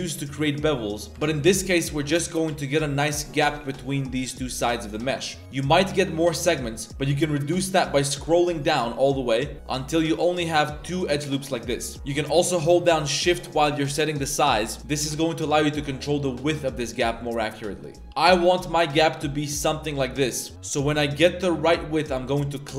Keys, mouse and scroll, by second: 1.1 ctrl+b, 1.4 ctrl+b, 11.9 ctrl+shift+b, 14.8 ctrl+b, 18.0 ctrl+shift+b, 20.5 ctrl+shift+b.